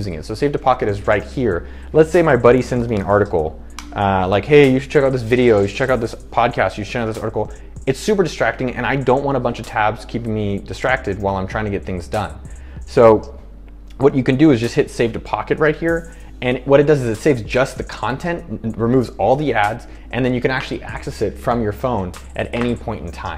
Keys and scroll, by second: 2.6-3.7 typing, 4.0 Return.